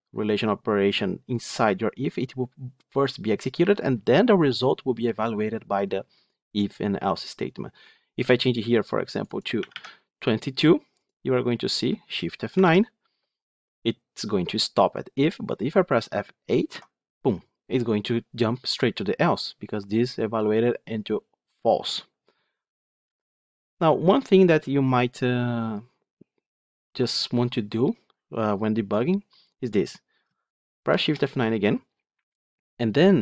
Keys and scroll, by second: 12.4 shift+F9, 16.6 F8, 23.0 F9, 30.8 shift+F9.